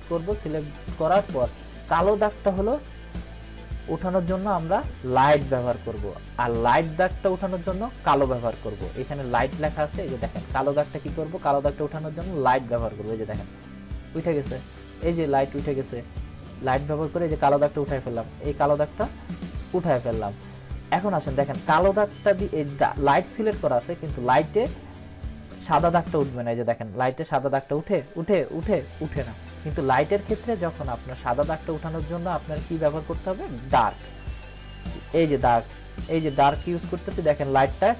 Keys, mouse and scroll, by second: 5.2 click, 13.4 click, 17.1 click, 19.6 click, 26.8 click, 33.7 click.